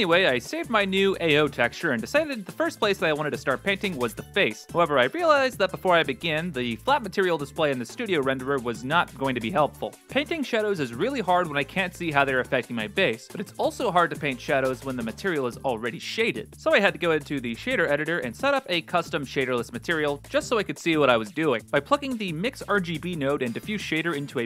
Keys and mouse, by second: 0.0 shift+middle click, 0.4-1.5 middle drag, 2.1 b, 2.9 n, 4.4 click, 5.7 click, 7.9 click, 10.0 ctrl+space, 11.4 click, 12.5 right click, 12.6 g, 13.2 ctrl+space, 13.9 middle click, 14.4 click, 14.6 shift+a, 19.5-20.7 drag, 21.0 click, 21.2 shift+a, 23.8 g.